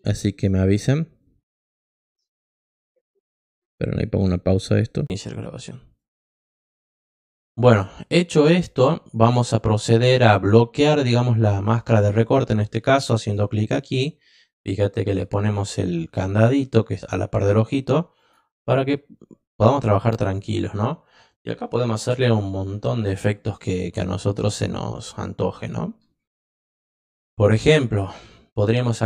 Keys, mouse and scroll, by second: 3.2 click, 4.9 click, 5.9 click, 7.0 click, 9.5 click, 11.8 click, 13.1 click, 20.2 click.